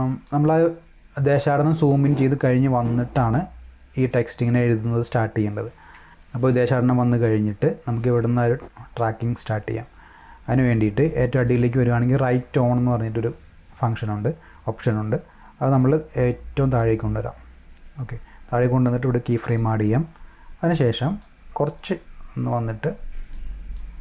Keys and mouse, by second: 0.3-2.4 drag, 2.7 space, 3.1 space, 10.5 click, 15.7-16.7 drag, 19.5 click, 21.2-23.3 drag, 23.7 click.